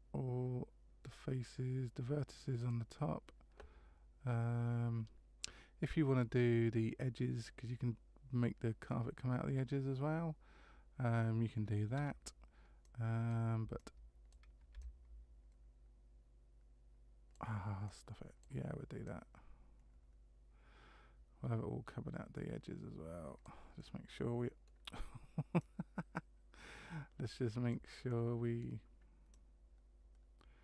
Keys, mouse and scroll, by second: 2.6 click, 11.9 c.